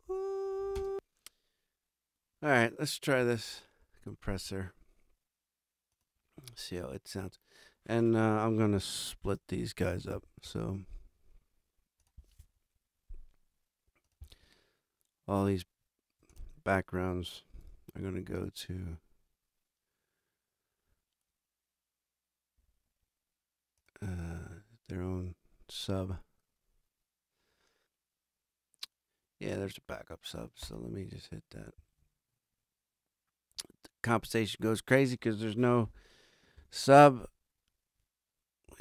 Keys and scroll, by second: 0.7 space, 3.2 alt+a, 9.2 super+=, 36.6 shift+super+n.